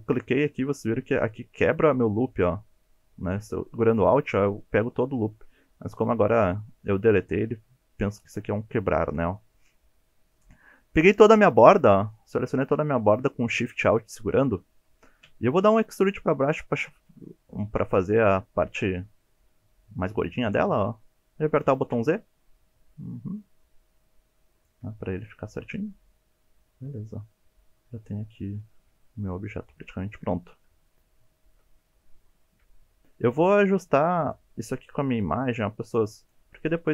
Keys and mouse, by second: 2.4 middle click, 10.3-11.7 middle drag, 12.1-12.9 shift+middle drag, 13.1-14.5 middle drag, 15.2 KP_1, 16.2 e, 21.9 z, 24.5 click, 25.6-28.1 middle drag, 28.6 KP_7, 30.4 alt+z, 30.9 shift+click, 31.7-32.1 shift+drag, 32.4 1, 32.8 click, 33.3 g, 34.2 drag, 34.7 click, 34.9 g, 35.4 click, 36.2 click, 36.4 g, 36.8 click.